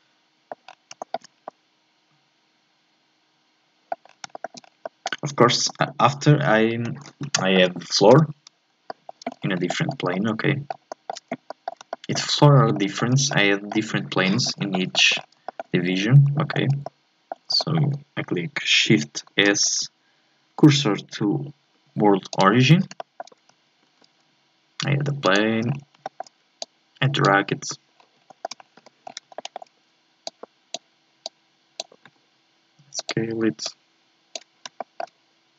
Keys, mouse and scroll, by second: 0.7-1.0 scroll down 1, 1.0 shift+middle click, 1.3 scroll up 2, 1.5-4.1 middle drag, 4.1 scroll down 2, 4.3-4.8 shift+scroll up 4, 4.3 shift+middle click, 4.8 middle click, 5.5 shift+s, 7.4 shift+middle click, 8.2 n, 8.5-8.9 shift+scroll up 1, 8.9 shift+middle click, 9.3-9.7 scroll up 1, 9.7-11.4 shift+middle drag, 11.4 scroll up 1, 11.6-14.6 middle drag, 14.6-15.5 shift+scroll down 6, 14.7 shift+middle click, 15.5 shift+middle click, 16.2-16.8 scroll up 4, 16.4 shift+middle click, 16.8-19.3 middle drag, 19.3 shift+s, 23.0 shift+middle click, 23.8 shift+a, 25.6-26.0 scroll down 2, 26.0 shift+middle click, 26.6 click, 27.4-27.9 scroll up 2, 27.9 scroll down 2, 28.2 scroll up 1, 28.3 shift+middle click, 28.6 scroll down 1, 28.8 KP_7, 29.0 scroll up 4, 29.4 shift+middle click, 30.2-32.0 drag, 32.0 s, 33.6-34.8 drag, 34.8 shift+middle click, 35.2-35.5 scroll up 1.